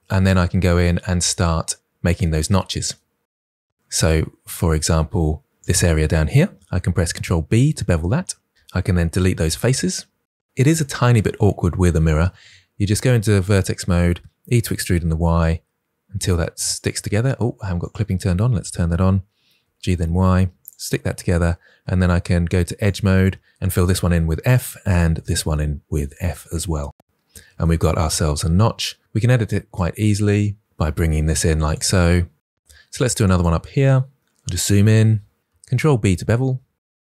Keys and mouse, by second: 0.6 Tab, 5.5 click, 6.9 ctrl+b, 10.7 Delete, 12.3 1, 14.3 e, 14.7 y, 16.6 click, 17.7 click, 19.5 g, 19.7 y, 20.5 click, 21.9 2, 22.7 click, 23.8 f, 24.7 click, 25.1 f, 28.4 Tab, 28.8 Tab, 29.3 1, 30.3 KP_1, 31.4 g, 34.3 KP_Decimal, 35.7 ctrl+b.